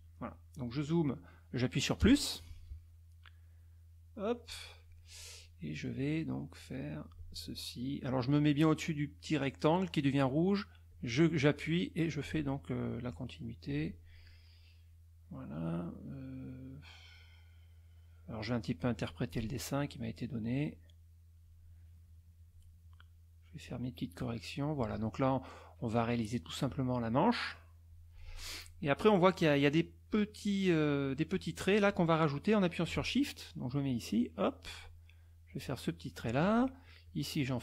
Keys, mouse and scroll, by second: 2.0 KP_Add, 3.7 middle click, 6.0-7.3 drag, 10.9-12.4 drag, 13.1 click, 17.1-19.5 drag, 20.6-21.6 drag, 22.0 click, 22.9 click, 24.1 click, 26.4-28.1 drag, 33.8-34.9 shift+drag, 35.5 shift+click, 37.0 shift+click.